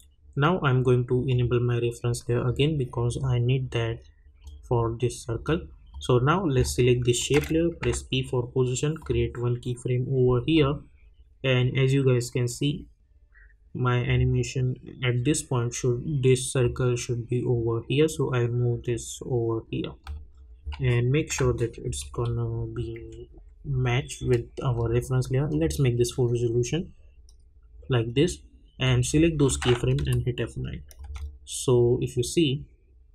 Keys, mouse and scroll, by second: 7.8 p, 9.0-16.4 drag, 16.6-20.9 drag, 20.9-21.4 alt+scroll up 1, 21.8 Right, 24.7 click, 26.4-26.7 scroll down 1, 28.8 click, 29.9 F9, 30.6 click, 31.0 space.